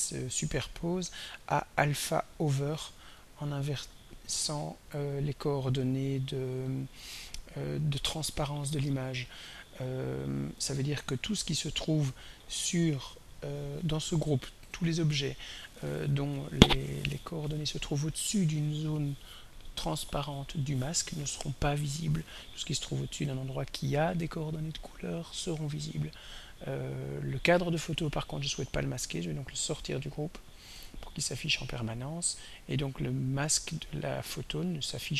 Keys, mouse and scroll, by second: 1.5 click, 3.2 click, 3.8 click, 14.8 click, 20.5 click, 26.9 click, 28.8-30.0 drag, 32.2 click, 33.0 click.